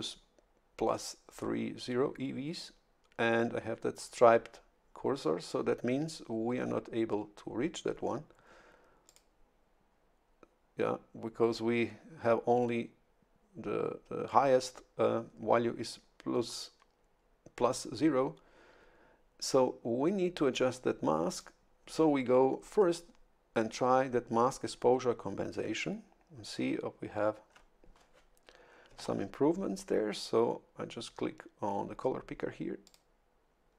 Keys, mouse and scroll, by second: 9.1 click, 21.3 click, 29.0 shift+F11, 32.8 click.